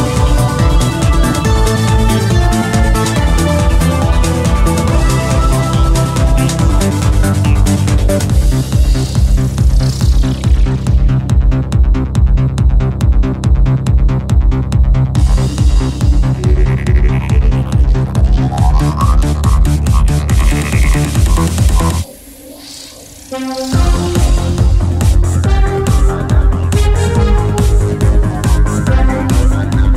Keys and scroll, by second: 0.5 f, 1.1 r, 1.8 ctrl+z, 2.3 ctrl+z, 5.2 ctrl+Left, 8.7 ctrl+Left, 14.2 ctrl+BackSpace, 18.8 ctrl+BackSpace, 22.8 ctrl+\, 23.1 ctrl+BackSpace, 26.8 ctrl+Left.